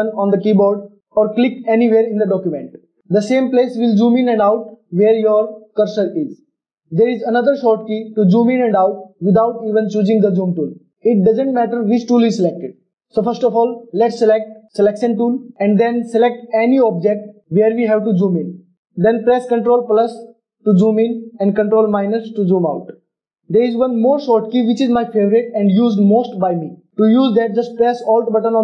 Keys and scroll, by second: 19.8 ctrl+KP_Add, 20.1 ctrl+KP_Add, 20.7 ctrl+KP_Add, 21.9 KP_Subtract, 22.2 KP_Subtract, 22.4 KP_Subtract.